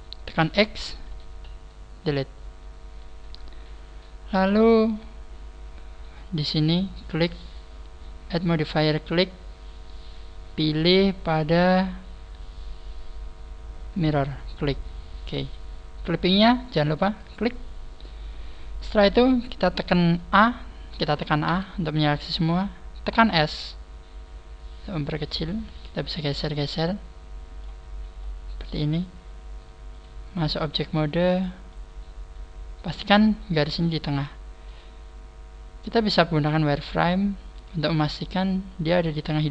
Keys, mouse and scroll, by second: 0.4 x, 7.0 click, 8.6 click, 17.1 click, 25.1 click, 28.2 scroll up 5, 29.9 click, 29.9 scroll up 1, 30.7 click, 34.7 click, 37.3 scroll up 2, 38.3 click.